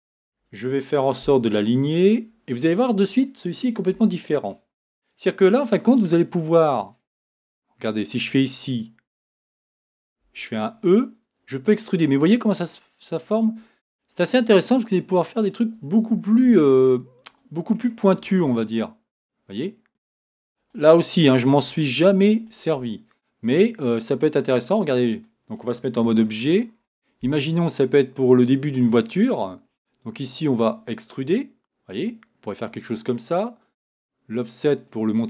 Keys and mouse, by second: 2.5 click, 2.6 middle click, 3.9 Tab, 8.1-9.9 right drag, 10.2 e, 16.4 e, 18.4 e, 19.9 r, 19.9 g, 22.7 g, 26.0 Tab.